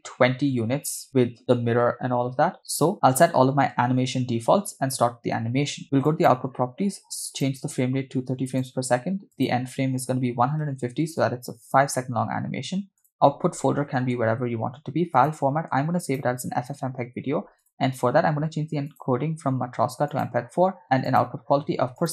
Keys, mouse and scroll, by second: 6.1 click, 7.3-8.8 drag, 9.3-11.4 drag, 12.4-13.0 scroll down 2, 13.0-14.2 drag, 13.8 /, 15.1-16.4 drag, 16.9 scroll down 2, 17.6 click, 18.0-18.9 scroll down 2, 18.9-20.4 drag, 21.1-22.1 drag.